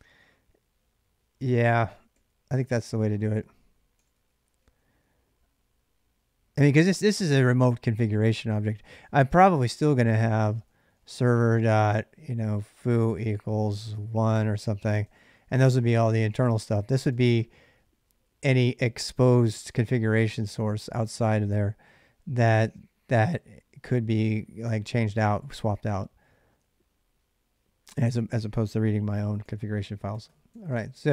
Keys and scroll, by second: 0.0-0.5 typing, 1.9-4.4 typing, 8.6-11.0 typing, 12.3-17.4 typing, 28.4-31.1 typing.